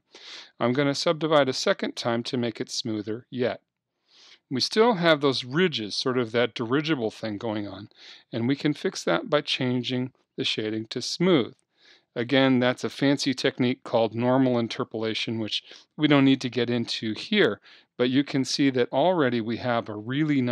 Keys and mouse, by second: 1.2-3.2 drag, 4.8-10.6 middle drag, 10.6-12.6 drag, 20.0-20.5 middle drag.